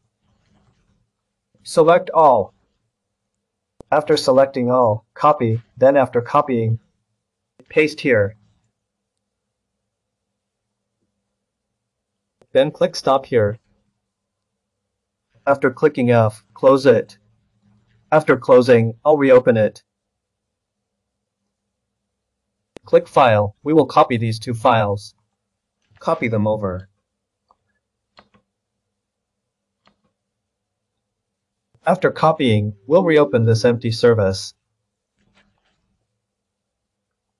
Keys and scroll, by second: 0.7 ctrl+a, 24.9 ctrl+c, 25.9 ctrl+v.